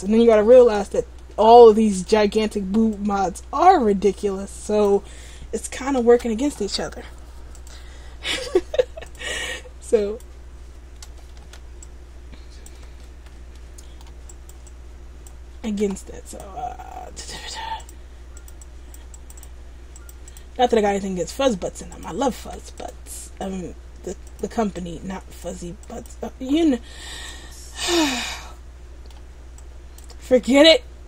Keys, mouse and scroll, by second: 0.2 middle click, 1.3 middle click, 2.3 middle click, 3.1 click, 6.2 ctrl+z, 7.1-7.7 scroll up 5, 7.7 click, 9.5 click, 11.5 ctrl+z, 12.0 click, 13.2 ctrl+z, 13.7 middle click, 14.4 click, 14.8 click, 15.8 ctrl+z, 16.4 click, 18.5 click, 18.7 click, 19.2 click, 19.5 click, 20.1 click, 20.4 click, 20.8 middle click, 21.6 middle click, 22.1 click, 22.6 ctrl+z, 22.9 click, 24.9 click, 26.0 click, 26.8 middle click, 27.4 click, 28.5 middle click, 29.7 click, 30.4 ctrl+z.